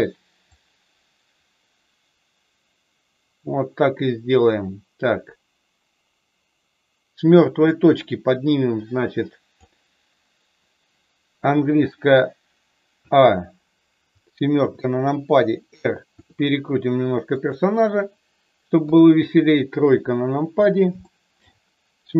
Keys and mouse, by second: 0.4-9.7 drag, 12.9 a, 14.6 KP_7, 16.2 r, 17.3 click, 18.7 KP_3, 20.9 shift+middle click.